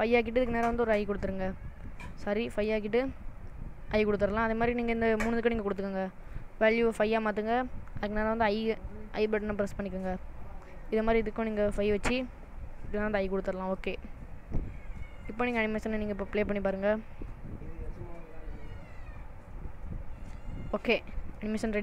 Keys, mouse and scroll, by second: 4.0 i, 5.0 click, 6.4 click, 8.7 i, 9.7 click, 10.8 click, 13.0 i, 14.5 click, 16.8 space, 21.0 middle click.